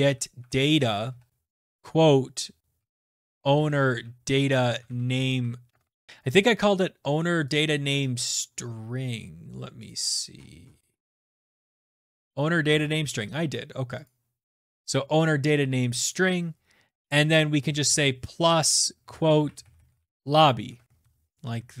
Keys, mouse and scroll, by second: 0.0-5.8 typing, 6.1 click, 7.6 click, 9.9 click, 10.1-11.9 scroll, 10.6 click, 12.0 click, 12.1 click, 12.6 ctrl+c, 14.0 click, 14.6 ctrl+v, 16.1 click, 18.4-21.8 typing, 21.5 Right.